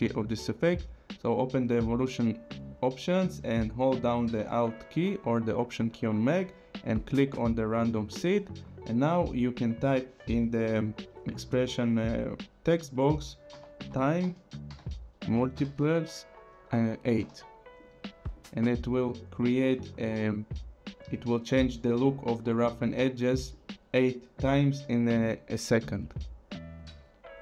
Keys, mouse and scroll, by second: 7.0 alt+click, 13.3-15.5 typing, 17.2 KP_8, 17.8 click, 18.9 click, 23.5 click.